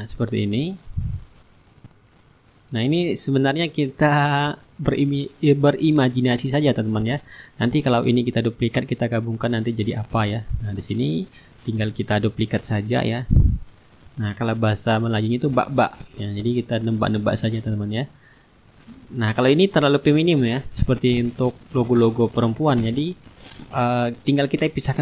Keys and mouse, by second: 0.5 click, 1.9 click, 4.0 click, 5.3 click, 7.7 click, 9.0 Return, 11.1 click, 11.9-13.1 right drag, 13.0 ctrl+d, 14.0-23.0 drag, 23.3 click.